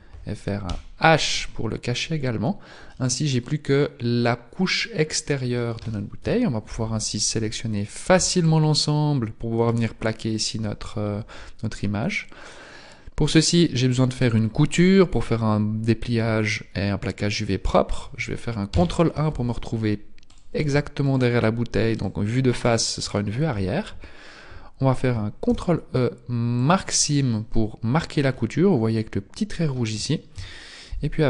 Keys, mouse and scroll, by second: 0.7 h, 3.0 middle click, 8.2 KP_1, 8.2 b, 9.6 b, 11.8 middle click, 18.7 ctrl+KP_1, 20.2 right click, 21.0 shift+right click, 21.9 shift+right click, 22.6 shift+right click, 25.4 ctrl+e, 27.5 a, 28.4 middle click, 30.3 KP_1, 31.0 middle click, 31.0 KP_1.